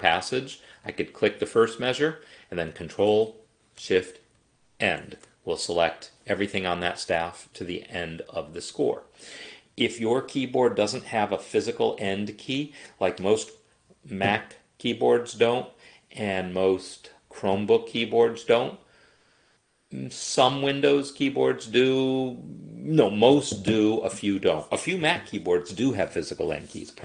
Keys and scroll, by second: 4.7 ctrl+shift+End.